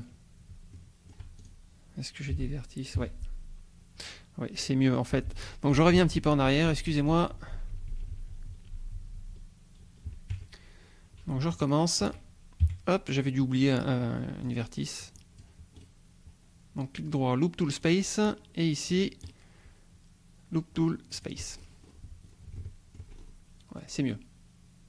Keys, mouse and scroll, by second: 0.7 shift+click, 1.4 shift+click, 2.3 g, 3.0 Escape, 4.6 scroll down 2, 5.3 ctrl+z, 5.7 ctrl+scroll down 1, 10.4 ctrl+Tab, 10.7-11.0 ctrl+scroll down 3, 11.5 shift+click, 12.6 KP_1, 13.2 scroll down 2, 14.5 click, 15.8 right click, 17.8 click, 18.2-19.1 drag, 19.3-21.2 right drag, 21.2 click, 21.4 right click, 21.5 scroll up 1, 21.8 right click, 22.3-23.1 scroll down 1, 23.1 shift+scroll up 1, 23.4 shift+right click, 24.0 scroll down 2.